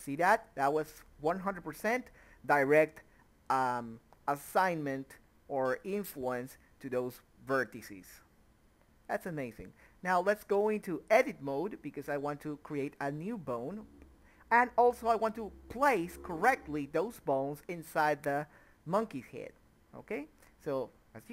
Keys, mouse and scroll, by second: 0.1 middle click, 0.5 Tab, 1.4 click, 4.1 ctrl+z, 4.2 click, 5.1 ctrl+z, 5.4 click, 6.5 ctrl+z, 7.0 a, 7.1 middle click, 7.6 scroll up 1, 7.7 middle click, 8.3 KP_3, 8.7 click, 9.0 a, 9.1 middle click, 9.5 click, 9.9 a, 10.2 click, 11.2 click, 11.7 middle click, 11.9 click, 11.9 middle click, 12.2 shift+click, 12.4 KP_7, 12.8 g, 13.5 click, 14.0 g, 14.2 click, 14.6 g, 14.9 click, 15.1 middle click, 15.7 click, 16.4 a, 17.2 click, 17.7 a, 17.9 middle click, 18.4 click, 19.1 Tab, 19.2 Escape, 19.4 click, 19.7 ctrl+z, 19.9 click, 20.3 Tab, 20.6 click, 20.7 Tab.